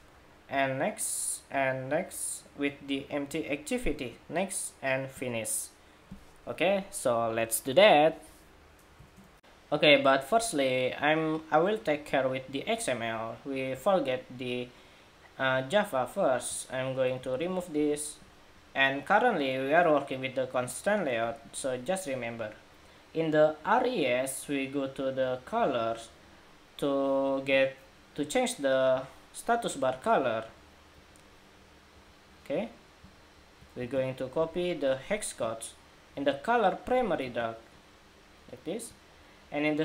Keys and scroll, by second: 9.3 shift+super+2, 33.5 super+c, 37.0 super+v.